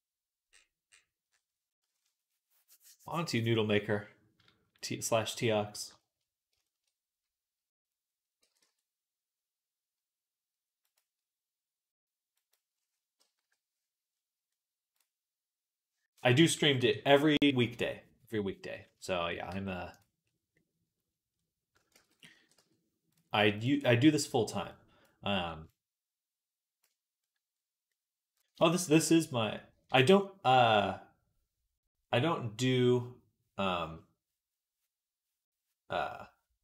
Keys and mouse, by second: 6.0 click, 6.6-8.2 drag, 8.2 g, 13.2 KP_3, 14.3 middle click, 16.3 click, 16.6 KP_3, 19.3 g, 21.8 ctrl+z, 22.2-24.5 middle drag, 22.2 e, 24.5-36.6 drag.